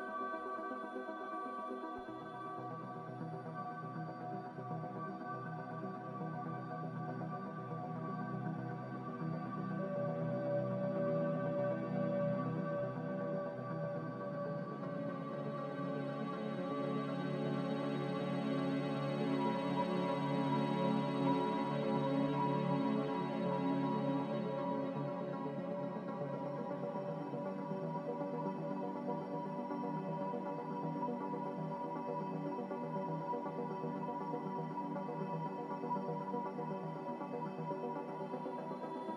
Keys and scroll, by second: 10.1 g, 13.8 z, 22.5 a, 27.2 ctrl+z, 34.4 g, 36.3 z.